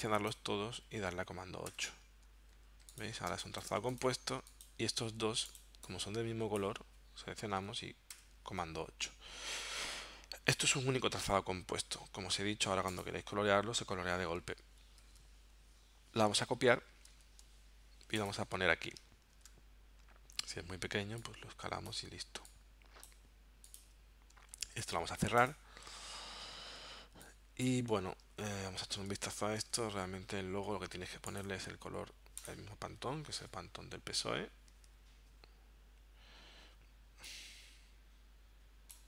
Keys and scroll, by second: 1.7 super+8, 2.6 z, 3.3 space, 3.8 v, 5.2 super+z, 8.1 super+8, 15.0 super+z, 17.1 super+c, 19.3 super+v, 24.5 super+w, 28.6 super+Tab, 29.9 super+Tab.